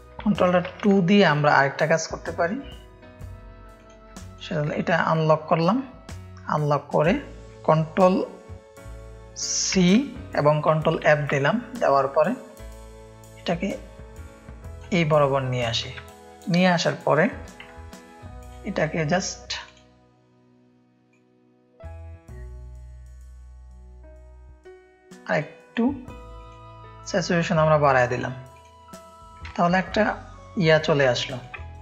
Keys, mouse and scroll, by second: 0.4 ctrl+alt+2, 0.9 click, 3.7 click, 4.1 click, 4.2 space, 4.5 click, 9.7 ctrl+c, 11.0 ctrl+f, 12.4-14.7 drag, 15.9 ctrl+space, 16.1 ctrl+click, 17.6 [, 19.6-20.8 drag, 21.1-25.7 drag, 26.3 click, 28.5 click, 29.4 ctrl+click, 29.5 ctrl+space, 29.9 click, 31.3 click, 31.6 space.